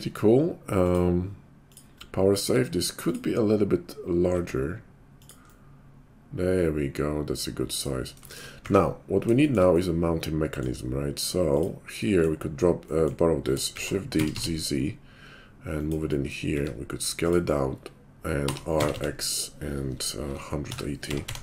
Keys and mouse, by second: 0.8-3.1 drag, 3.1-11.5 middle drag, 4.3 s, 11.5 click, 11.6-21.4 middle drag, 13.6 shift+d, 16.5 s, 18.4 r.